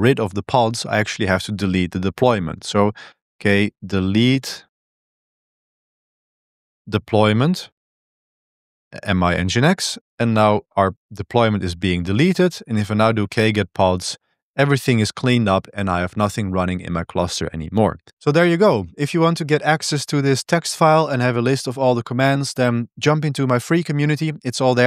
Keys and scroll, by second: 3.1-8.0 typing, 8.6 Tab, 9.4 Return, 9.9-14.2 typing.